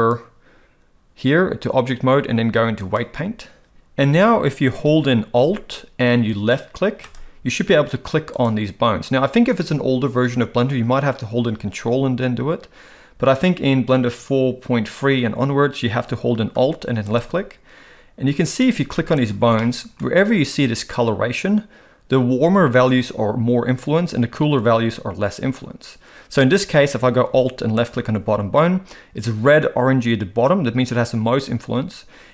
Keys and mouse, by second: 0.2-3.2 drag, 7.1 alt+click, 8.3 alt+click, 19.2 alt+click, 19.6 middle click, 27.8 alt+click.